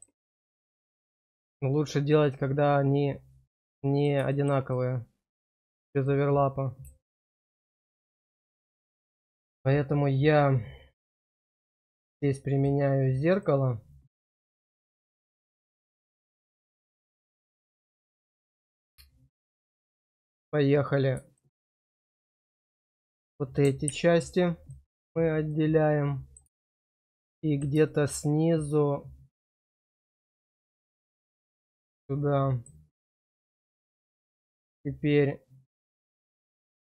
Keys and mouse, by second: 0.2-4.0 middle drag, 4.2 shift+middle click, 4.7 middle click, 5.6 shift+middle click, 6.0 middle click, 7.2 shift+middle click, 11.4 click, 12.5 click, 14.6 middle click, 15.2 shift+middle click, 16.6 middle click, 17.3 shift+middle click, 18.8 click, 19.4 right click, 19.6 right click, 21.3 shift+middle click, 25.6 middle click, 26.6 shift+middle click, 27.0 middle click, 27.8 shift+middle click, 33.1 middle click, 33.8 shift+middle click, 35.8 click, 36.3 shift+click, 36.5 shift+click.